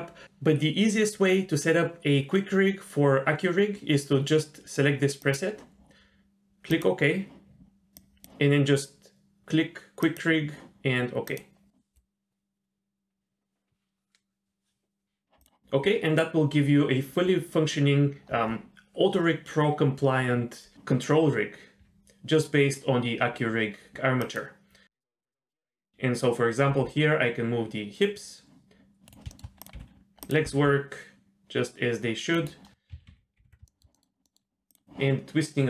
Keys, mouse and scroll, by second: 7.9 click, 10.0-13.9 drag, 24.2 click, 25.3-25.8 scroll up 1, 26.7 g, 29.3 shift+middle click, 29.6 click, 29.8 g, 30.5 r, 33.1 alt+f, 33.4 alt+g, 33.7 shift+middle drag, 33.9 middle click, 34.2 middle drag, 34.5 scroll up 1, 34.7 drag.